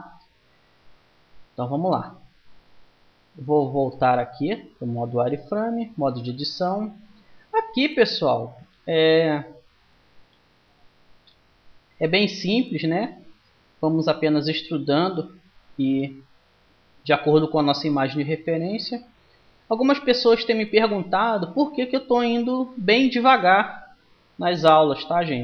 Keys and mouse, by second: 3.4 z, 5.0 Tab, 13.7 e, 18.3-25.4 middle drag.